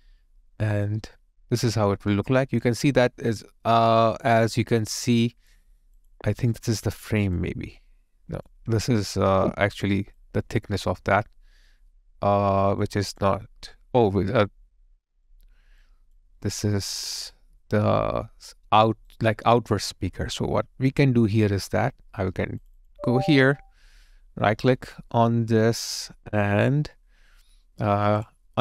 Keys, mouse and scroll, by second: 5.0 alt+click, 10.2 alt+click, 14.5 alt+click, 16.4 alt+right click, 19.2 alt+click, 22.8 double click, 24.7 right click.